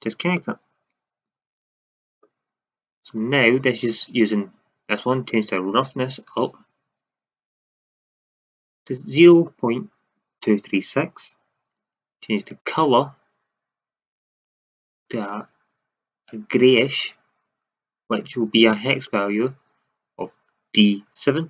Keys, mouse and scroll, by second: 0.4 middle drag, 1.7 shift+z, 5.2-7.0 drag, 8.0 middle click, 12.4-15.0 drag.